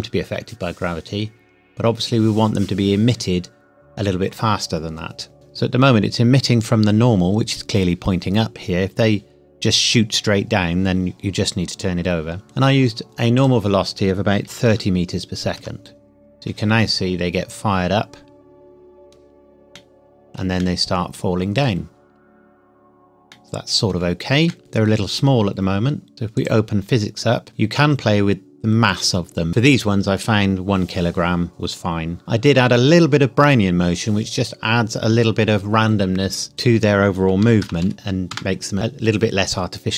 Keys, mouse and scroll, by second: 13.3 click, 14.5 KP_3, 14.7 KP_0, 15.5 KP_Enter, 16.3-16.7 scroll up 1, 16.8 scroll down 1, 19.9 shift+middle click, 24.8-25.3 scroll up 1, 26.1 scroll down 1, 26.5 click, 27.5 scroll down 1, 36.5 click, 37.4 KP_Decimal, 37.6 KP_0, 37.8 KP_1.